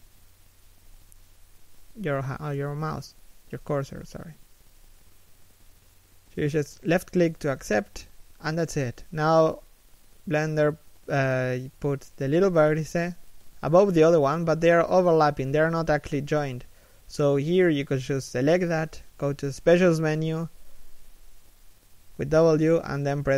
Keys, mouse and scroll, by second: 8.6 middle click, 9.4 scroll up 1, 11.5 scroll down 1, 11.7 z, 12.1 scroll up 1, 13.0 scroll up 1, 13.4 g, 15.1 right click, 15.2 g, 15.9 z, 16.4 scroll down 1, 17.1 a, 17.4 b, 19.2 z, 19.4 middle click, 21.3 w.